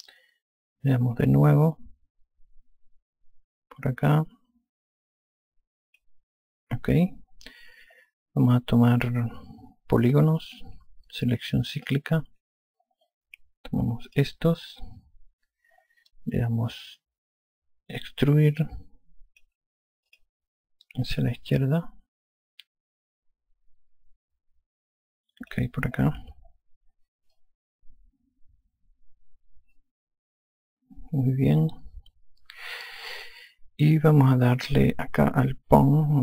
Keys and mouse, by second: 2.6 click, 12.7 click, 14.9 click, 17.8 alt+click, 21.0 click, 28.2 alt+click.